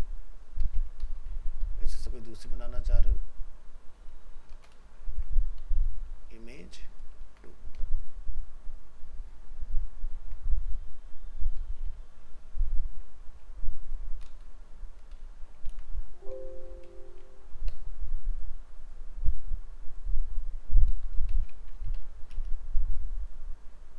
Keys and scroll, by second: 0.9 ctrl+c, 2.0 ctrl+v, 11.8 alt+f, 11.9 alt+移, 15.7 ctrl+c, 21.6 ctrl+c.